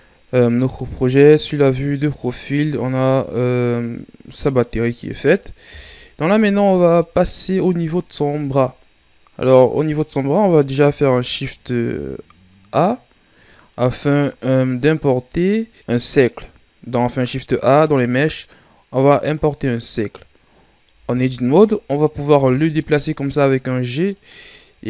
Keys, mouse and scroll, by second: 1.0 KP_3, 2.3-3.0 shift+scroll up 3, 3.0-5.7 middle drag, 5.7 KP_1, 6.7-7.2 ctrl+scroll up 4, 7.5-8.9 ctrl+scroll up 3, 9.8-10.6 ctrl+scroll down 2, 10.8 shift+a, 20.9 Tab, 22.3 g, 24.7-24.8 ctrl+scroll up 3.